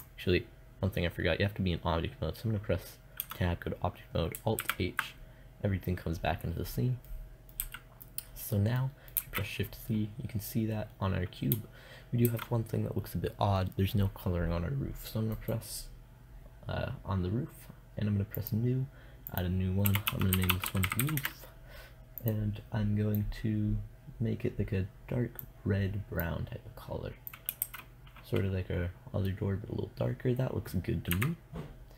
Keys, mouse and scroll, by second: 2.6 Tab, 4.0 alt+h, 7.0 a, 7.6 middle click, 8.4 middle click, 8.6 shift+z, 11.7 shift+z, 20.3 o, 27.0 shift+z, 30.6 KP_0.